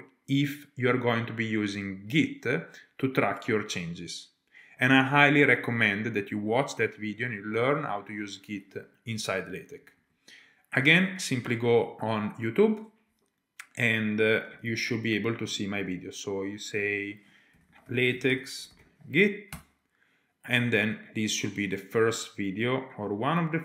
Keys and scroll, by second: 11.2 typing, 17.7-19.5 typing.